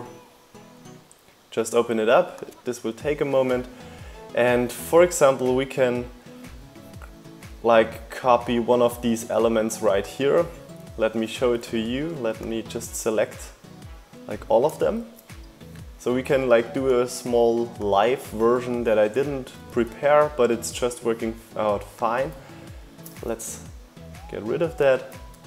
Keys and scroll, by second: 13.0 super+c, 17.9 super+v, 21.5 BackSpace.